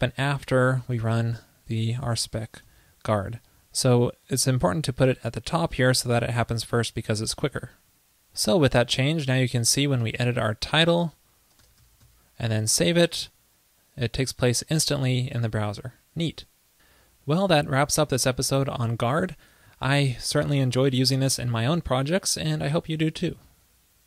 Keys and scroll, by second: 2.8 super+v, 6.2 super+s, 13.4 super+s.